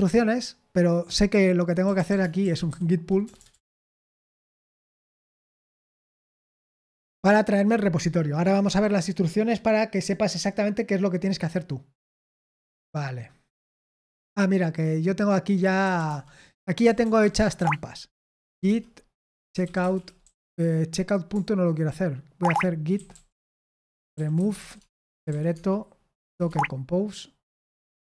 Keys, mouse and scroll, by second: 1.5-6.3 typing, 15.3-28.0 typing.